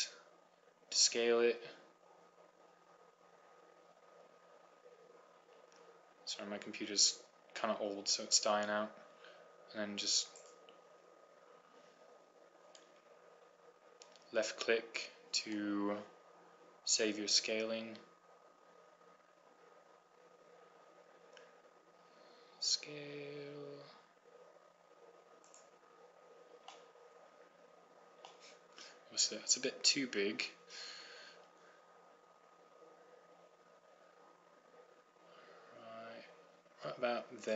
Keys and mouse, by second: 0.6 s, 11.5-13.2 right drag, 14.1 s, 21.0 middle click, 26.5-28.0 drag, 31.4 middle click, 32.5 s.